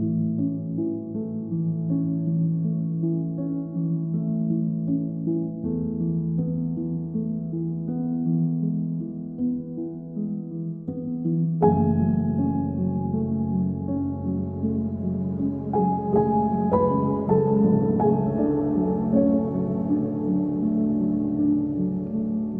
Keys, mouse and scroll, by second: 2.1 Tab, 3.7-6.0 right drag, 6.0-12.4 drag, 12.6 ctrl+s, 12.8 Tab, 14.7-16.2 right drag, 16.2-19.2 middle drag, 19.2 KP_1, 20.3 click.